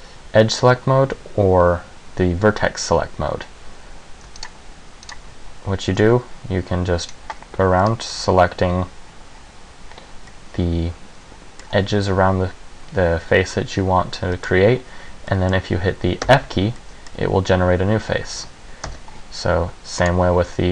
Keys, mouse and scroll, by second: 4.6 shift+right click, 5.2 shift+right click, 7.2 shift+right click, 8.0 middle click, 10.4 middle click, 13.7 middle click, 15.4 middle click, 16.4 f, 16.9 middle click, 19.0 ctrl+z, 20.2 click.